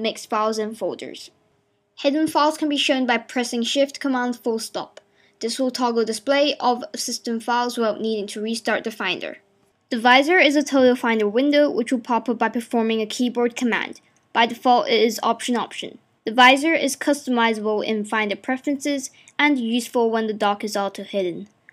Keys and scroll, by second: 3.4 shift+super+., 8.9 shift+super+..